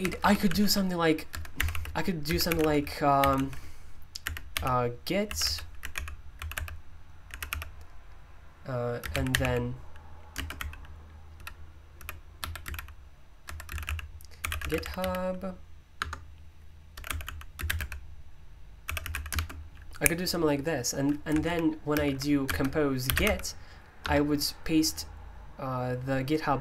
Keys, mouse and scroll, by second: 0.0 typing, 1.0-19.8 typing, 21.2-24.0 typing.